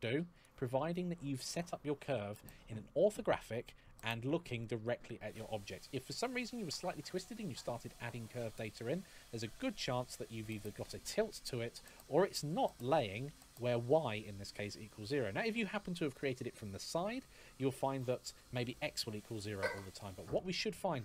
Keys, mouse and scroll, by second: 1.8 KP_1, 3.8-5.4 scroll down 1, 5.7 middle click, 8.8 click, 11.4-11.8 scroll up 1, 11.8 middle click, 15.0 middle click, 19.6 middle click, 20.8 click.